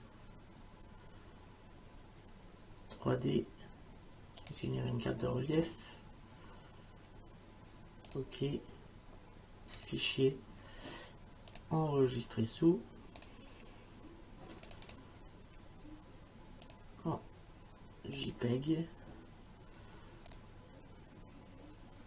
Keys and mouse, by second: 4.4 click, 8.1 click, 9.8 click, 11.5 click, 13.2 click, 14.7 click, 16.7 click, 18.2 click, 20.3 click.